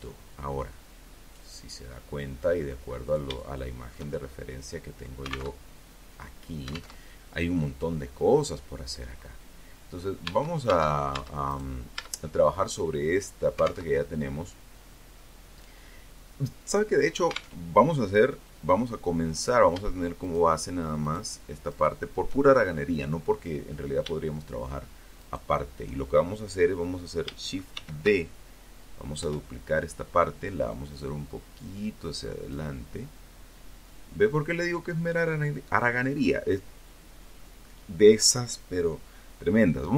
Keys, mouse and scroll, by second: 1.1-1.5 scroll up 3, 1.5-3.4 shift+middle drag, 3.7 alt+Tab, 5.1 alt+Tab, 5.9 click, 7.1 middle click, 8.4 Tab, 9.7 right click, 10.1 Tab, 12.0 alt+Tab, 15.7 alt+Tab, 17.5 right click, 18.4 shift+right click, 19.2 shift+right click, 19.9 shift+right click, 20.6-21.0 shift+scroll up 1, 23.3 shift+right click, 25.9 shift+d, 27.4 Return, 28.9-30.9 drag, 32.1-33.1 middle drag, 39.2 ctrl+KP_1.